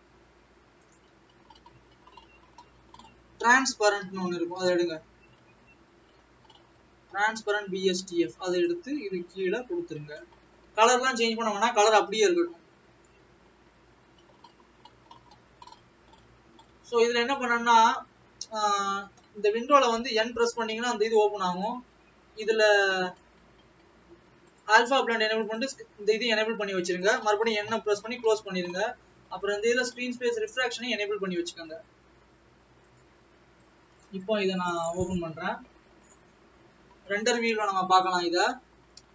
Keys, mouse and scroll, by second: 8.7 click, 9.5 click, 18.8 click, 21.6 click, 23.3 click, 24.7 click, 25.5 click, 27.1 click.